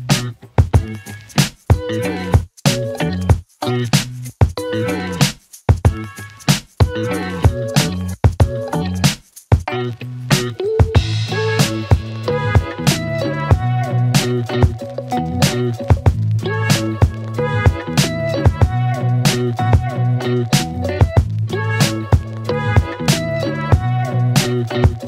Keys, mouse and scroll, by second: 7.5 click, 12.4 click, 18.4 click.